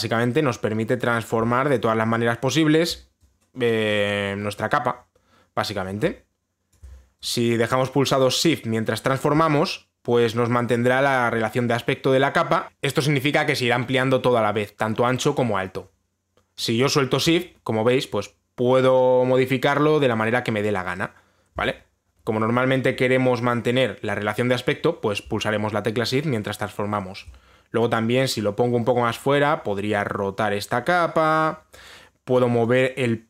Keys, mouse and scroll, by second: 3.4 shift+click, 5.1 click, 7.4 shift+click, 8.3 click, 22.2 click, 27.8 shift+click, 31.9 click.